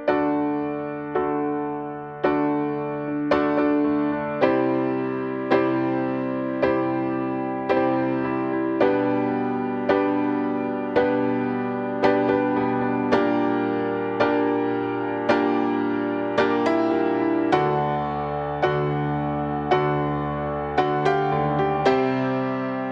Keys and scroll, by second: 0.7 ctrl+t, 3.0 ctrl+t.